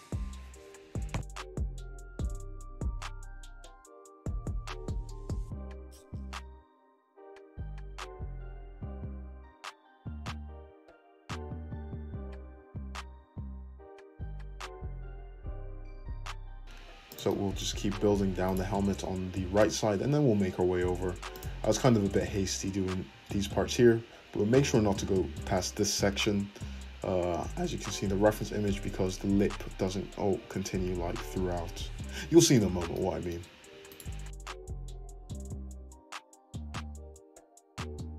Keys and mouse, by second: 0.4 click, 0.8 `, 1.0 click, 1.1-5.7 middle drag, 1.5 `, 2.7 f, 5.7 click, 6.2 middle click, 6.3-10.9 drag, 6.6 f, 10.4 Tab, 10.9 middle click, 11.6 `, 12.3 `, 13.4 `, 14.0 Tab, 14.8 middle click, 15.2 click, 15.3-18.4 shift+middle drag, 16.2 f, 16.6 g, 18.4 click, 18.5-19.6 middle drag, 18.9 `, 19.9 f, 20.4-21.4 shift+drag, 32.3 shift+click, 33.9 right click, 33.9-38.1 middle drag, 34.4 `, 35.7 f, 36.4 `, 37.8 Tab.